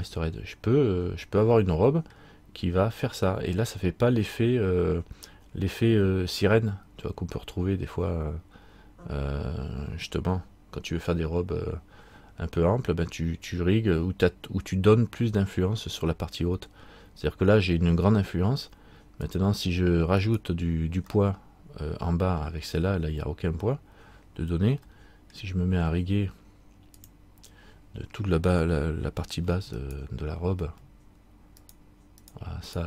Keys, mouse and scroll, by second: 20.4 right click, 21.3 middle click, 23.5 scroll up 1, 24.4 scroll up 1, 25.1 shift+middle click, 27.1 click, 30.0 alt+right click, 31.8 shift+right click.